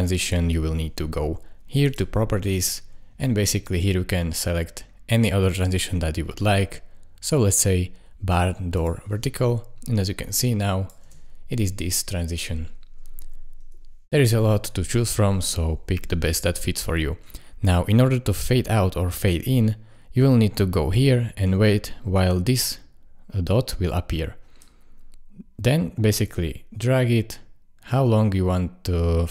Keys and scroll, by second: 11.0 space, 17.2 space.